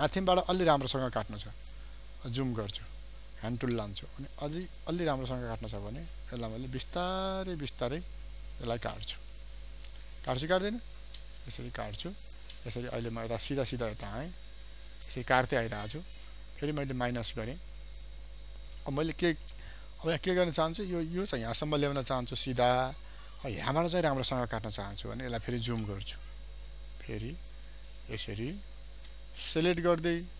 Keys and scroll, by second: 16.0 ctrl+space, 16.6 ctrl+alt+space, 23.7 ctrl+space.